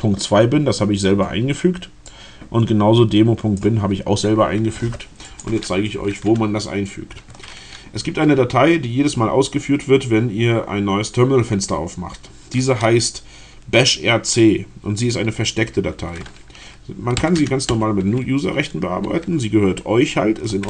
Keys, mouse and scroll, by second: 2.1-3.8 drag, 5.3 click, 16.8-18.6 typing, 20.5 space.